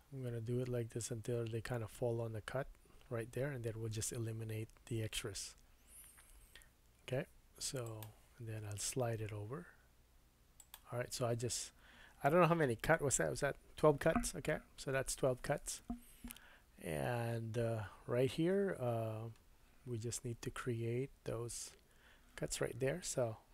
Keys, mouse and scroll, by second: 10.7-23.5 middle drag, 20.0-23.0 scroll up 1, 23.2 Tab.